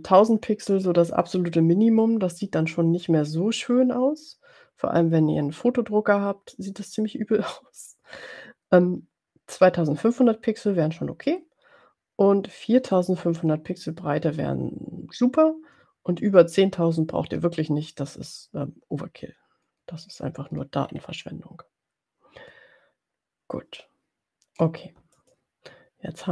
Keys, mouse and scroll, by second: 20.8-21.6 ctrl+scroll up 3, 25.2 click.